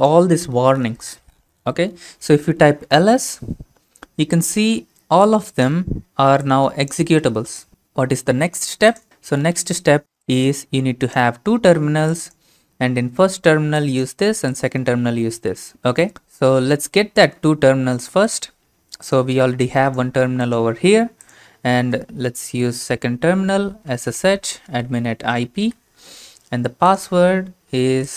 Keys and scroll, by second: 2.6-3.4 typing, 17.6 alt+Tab, 23.7-24.6 typing, 25.6 Return.